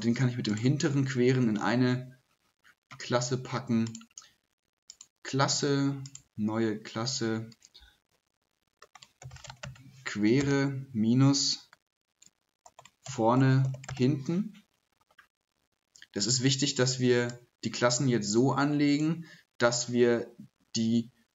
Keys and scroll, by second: 8.8-10.4 typing, 12.2-14.4 typing.